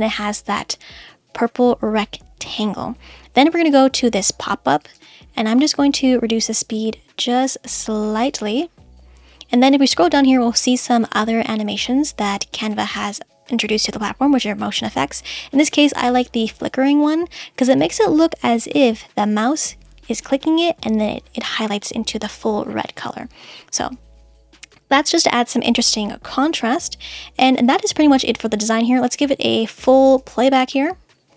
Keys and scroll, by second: 30.1 space.